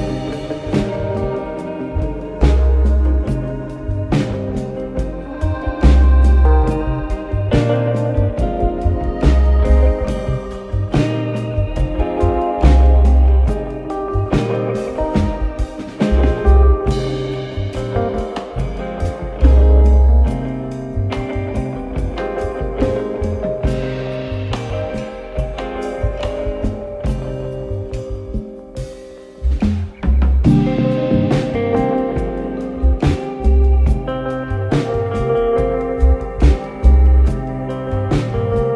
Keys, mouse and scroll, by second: 2.5 scroll, 2.6-3.1 scroll down 1, 3.1 KP_1, 4.3 click, 5.6 click, 6.3 click, 7.0-7.5 scroll up 4, 10.5 click, 11.7 shift+a, 19.9 click, 20.9 g, 25.4 click, 26.0 Tab, 26.6 click, 28.0 b, 29.9 click, 33.7 click, 34.1 b, 36.4 click.